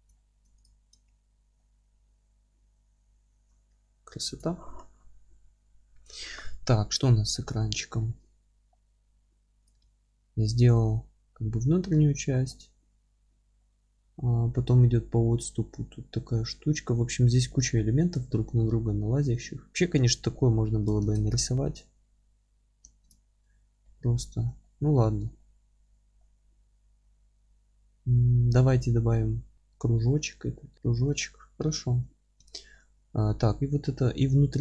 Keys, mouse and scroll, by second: 0.1 alt+middle click, 0.6 click, 0.8 scroll up 1, 1.0 alt+middle drag, 1.3 alt+z, 3.2-7.7 middle drag, 3.5 scroll down 1, 9.6 click, 9.8 Tab, 10.3-21.0 middle drag, 22.8 ctrl+space, 22.8-34.6 middle drag, 31.9 Tab.